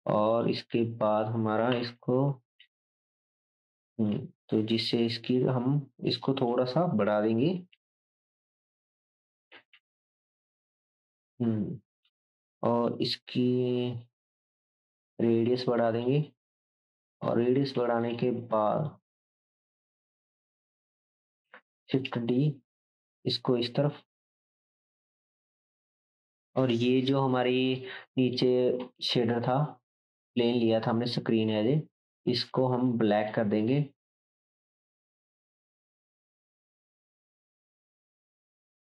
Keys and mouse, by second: 1.9 KP_0, 2.0 KP_0, 20.6 g, 21.2-25.2 shift+drag, 21.9 shift+d, 25.2 shift+middle click, 25.2 shift+right click, 25.5 shift+drag, 25.7-27.8 middle drag, 25.7-27.8 right drag, 33.3 click, 33.7-35.4 drag, 37.6-38.8 drag.